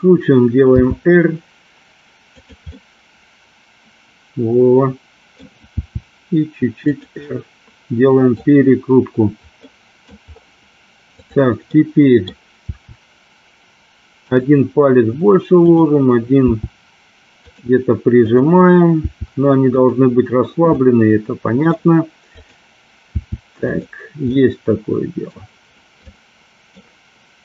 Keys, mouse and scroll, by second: 0.8 r, 2.5 click, 2.7-5.5 middle drag, 5.8 r, 7.3 middle click, 9.8 middle click, 11.2 click, 11.8 middle click, 12.7 r, 14.3 click, 15.7 click, 16.4 r, 18.3 click, 19.1 r, 19.8 click, 20.8 middle click, 22.3 click, 23.2 r, 23.8 click, 24.4-25.5 middle drag, 26.2-26.8 middle drag.